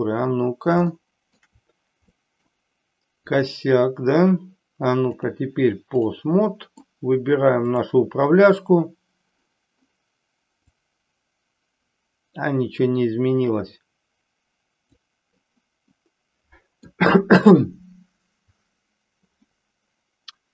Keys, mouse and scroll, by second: 0.9-1.5 shift+middle drag, 2.1-2.6 middle drag, 3.2 click, 5.1-6.1 drag, 6.5-7.0 middle drag, 7.6 click, 10.6-15.0 drag, 16.0-17.1 middle drag, 19.5-20.5 middle drag.